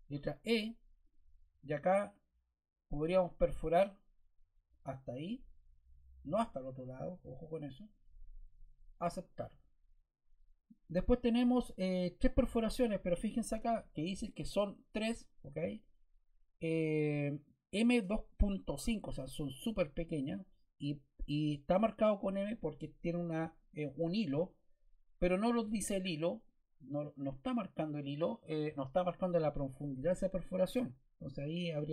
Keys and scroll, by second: 0.0 e.